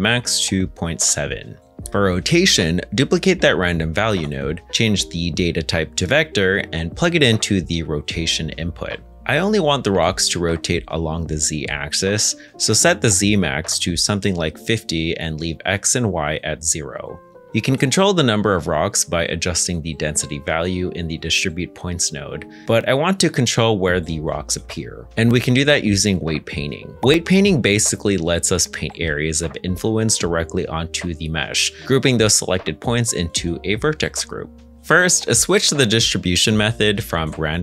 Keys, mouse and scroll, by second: 0.2 ., 0.5 7, 0.8 Return, 3.2 shift+d, 8.7 g, 9.7 click, 10.9 g, 14.2 5, 14.5 Return, 16.7 KP_0, 16.8 KP_Enter, 18.2 middle click, 18.5-19.0 scroll up 1, 19.2 shift+middle click, 19.8 middle click, 35.6 middle click.